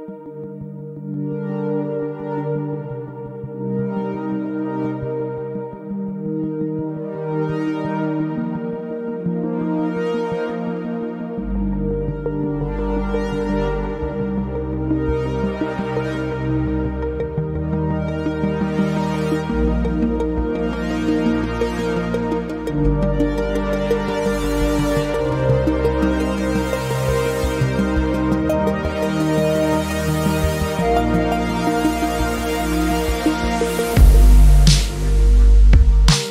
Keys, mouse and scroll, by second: 2.5 ctrl+click, 4.3 alt+click, 12.8-13.3 scroll down 1, 13.3 alt+middle click, 13.7 alt+click, 14.5 alt+middle click, 15.6 click, 15.9 double click, 17.7-18.3 scroll down 1, 18.3 click, 20.8-21.1 scroll down 1, 21.1 alt+click, 21.6 alt+middle click, 22.0 alt+click, 27.3-27.8 scroll up 1, 28.1 alt+middle click, 29.6 shift+click, 30.3-30.7 scroll down 1, 30.9 alt+click, 32.3 double click, 33.0-33.3 scroll up 1, 33.8 shift+click, 35.4-36.0 scroll down 1, 36.1 alt+middle click.